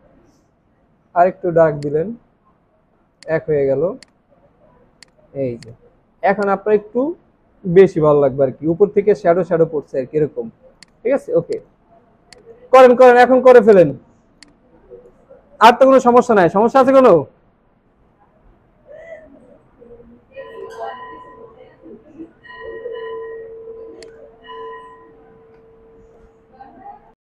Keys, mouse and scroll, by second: 6.1 alt+scroll down 1, 8.5 alt+scroll up 1, 10.2-10.8 alt+scroll down 2, 10.6 alt+space, 12.0 alt+scroll down 2, 12.3 space, 12.9-13.2 alt+scroll down 1, 19.0-20.2 scroll down 1.